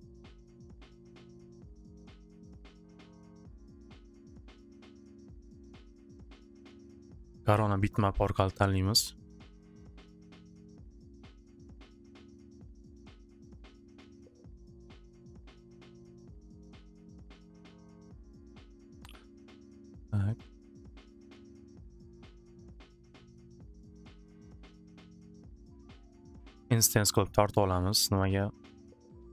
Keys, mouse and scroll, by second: 5.0 click, 10.2 click, 11.6 click, 11.8 click, 19.8 click, 22.0 click, 24.0 click, 25.1 click, 28.2 click.